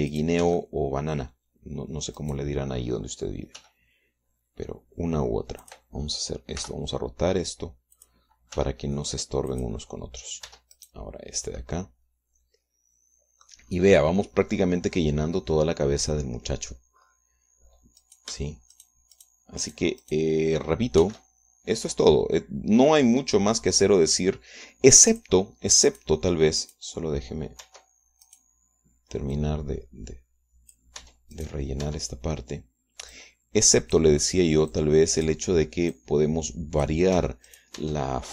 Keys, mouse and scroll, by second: 1.4 click, 1.6 Tab, 1.8 click, 3.4 click, 4.8 g, 6.9 click, 7.8 r, 9.2 click, 9.8 g, 10.8 click, 11.7 Tab, 12.0 click, 12.8-14.9 drag, 15.2-18.2 drag, 18.2-18.6 scroll up 2, 18.6 middle click, 19.3 click, 20.0 shift+click, 20.4 shift+click, 20.9 shift+click, 21.3 shift+click, 22.3 shift+d, 26.4 click, 27.2 right click, 27.9 right click, 28.9 Tab, 29.5 click, 29.6 right click, 30.6-32.2 drag, 32.2 Tab, 32.6 right click, 33.1 Tab, 34.4-35.4 drag, 36.0 click, 37.2-38.3 drag.